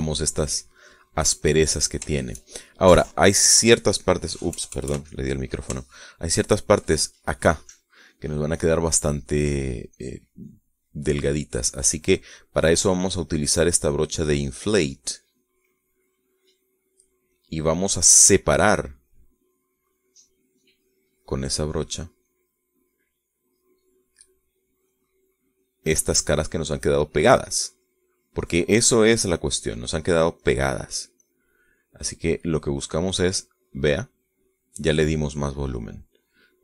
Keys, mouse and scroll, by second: 2.3-6.4 middle drag, 5.4 KP_Add, 6.8-7.8 shift+drag, 9.6 click, 10.8 click, 11.8-12.8 drag, 12.9 click, 13.6-17.2 drag, 17.8 click, 21.8-23.4 drag, 23.4-25.4 middle drag, 25.8-31.0 drag, 32.0 click, 32.6-34.8 middle drag, 36.3 middle click.